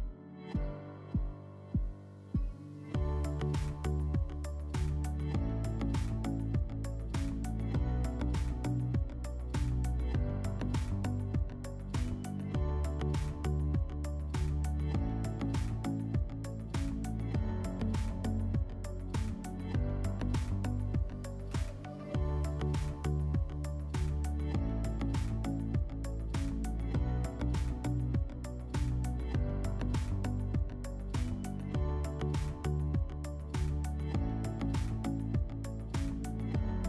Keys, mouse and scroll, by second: 4.1-5.2 drag, 10.6 click, 13.8 d, 15.7 click, 16.7 d, 19.5-21.1 drag, 21.4 middle click, 23.1 middle click, 24.9 click, 25.4 click, 27.6 click, 29.7 middle click, 30.7 click, 32.7 click, 34.2 click, 35.1 click.